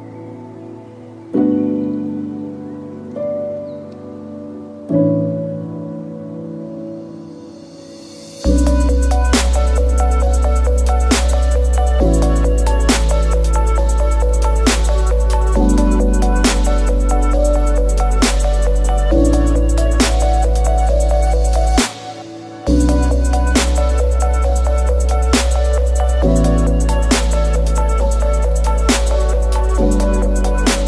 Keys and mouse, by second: 1.6 middle click, 11.7-14.1 drag, 14.1-28.9 middle drag, 30.7-30.8 middle drag.